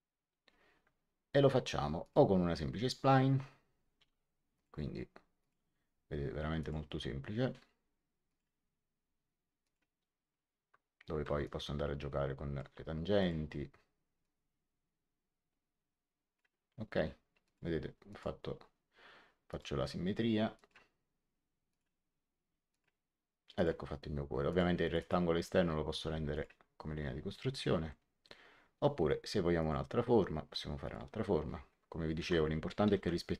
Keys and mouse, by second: 1.9 click, 3.9 x, 4.5 click, 6.5 click, 8.2 click, 9.5 click, 11.0 Escape, 11.3 click, 13.1 click, 17.3 click, 19.4 click, 20.5 click, 21.6 click, 25.8 x, 26.2 click, 27.8 middle click, 29.5 click, 30.7 click, 32.1 Tab, 32.8 h, 32.9 Tab.